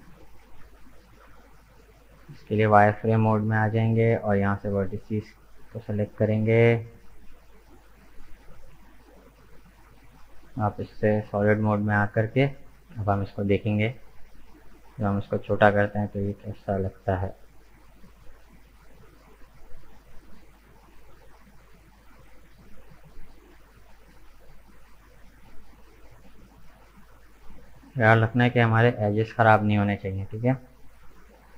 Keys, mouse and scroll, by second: 2.2-3.3 drag, 3.3 KP_1, 4.7-7.9 drag, 7.9-8.8 scroll up 1, 8.8-10.1 shift+middle drag, 10.1 click, 11.0-13.7 middle drag, 13.7 KP_1, 15.3 s, 23.7-26.7 middle drag, 29.3 KP_1, 30.1-31.5 scroll down 2.